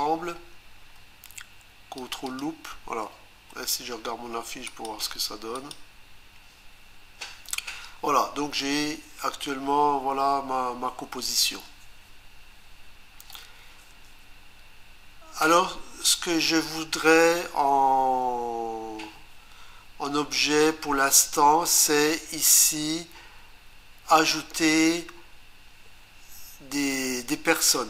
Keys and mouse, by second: 2.0 ctrl+click, 2.4 ctrl+double click, 4.7 click, 5.6 click.